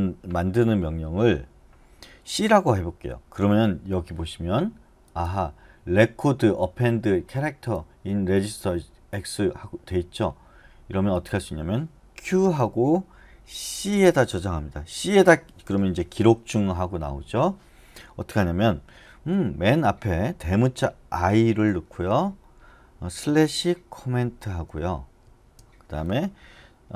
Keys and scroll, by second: 12.3 q, 13.7 c, 21.2 |, 23.2-24.2 typing, 25.2 space.